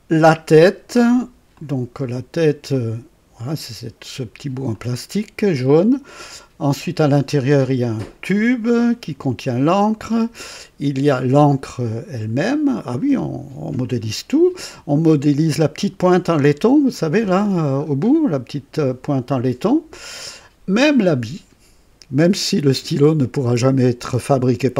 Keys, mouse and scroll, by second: 1.5 click, 2.7 click, 4.7 click, 17.2-18.0 scroll up 4.